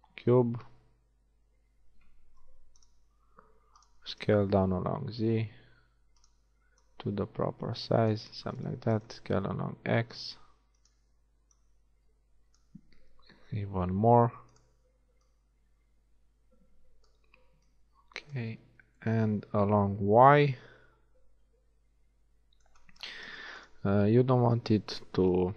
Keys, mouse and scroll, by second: 0.4 s, 3.0 g, 4.2 s, 6.9-8.9 drag, 8.9 s, 11.6-12.7 drag, 13.0 s, 15.3-17.1 drag, 17.8 click, 18.8 z, 23.1-25.0 middle drag, 24.5 s.